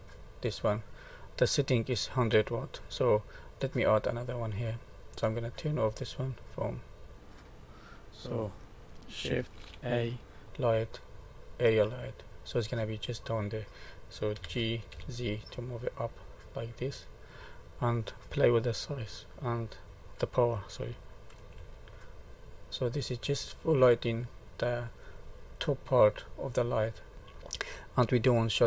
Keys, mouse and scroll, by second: 4.1 click, 5.1 click, 7.3 click, 9.5 shift+a, 14.3 g, 18.6 click, 19.8 0, 21.5 Return, 24.5 middle click, 25.2 scroll up 2, 25.7 middle click, 26.8 middle click.